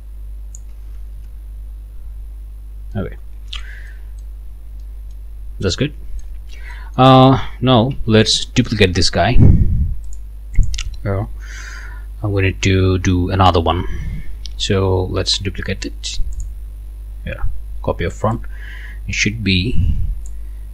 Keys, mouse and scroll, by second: 1.2 Return, 2.0-2.6 scroll down 1, 2.9 middle click, 3.9 middle click, 4.5 scroll up 1, 4.8 middle click, 5.6 scroll up 1, 6.4 scroll down 2, 6.7 middle click, 7.9 ctrl+s, 8.3 ctrl+middle click, 10.1 middle click, 10.6 middle click, 16.4 middle click, 18.3-20.5 drag.